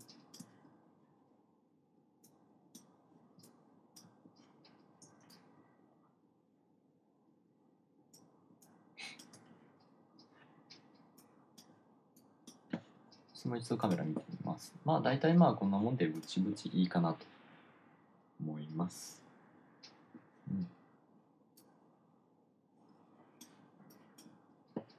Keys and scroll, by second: 0.4 1, 3.8 2, 4.2 2, 4.4 2.